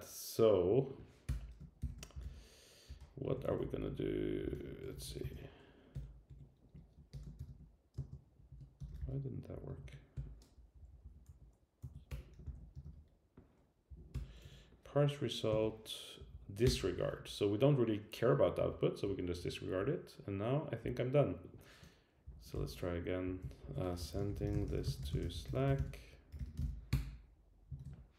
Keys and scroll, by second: 1.3 Return, 7.1 Return, 10.5 Up, 11.2 Up, 11.2 Right, 11.8 Left, 12.1 Return, 13.9 Down, 14.1 Return, 14.4 Right, 16.2 Down, 16.6 Return, 22.2 shift+Down, 23.3 Up, 23.6 shift+super+Right, 25.7 super+k, 26.9 Return.